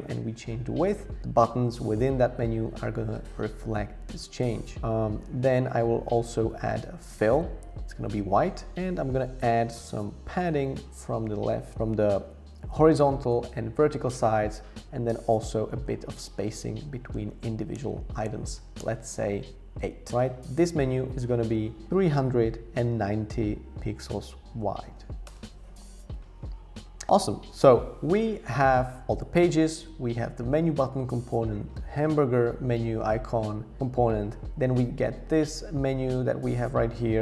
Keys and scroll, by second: 9.2 shift+Up, 9.8 shift+Up, 9.9 shift+Up, 10.4 Left, 15.5 Up, 15.7 Up, 15.8 Up, 16.0 Up, 17.1 Up, 17.3 Up, 17.7 Up, 18.2 shift+Up, 18.8 Left, 24.4-25.5 typing.